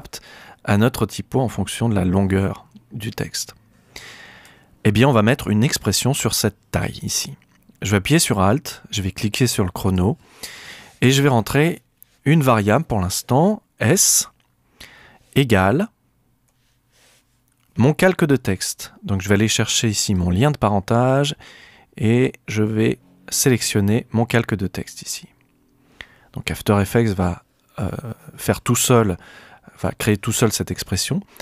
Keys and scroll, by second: 13.9 s, 16.4 =.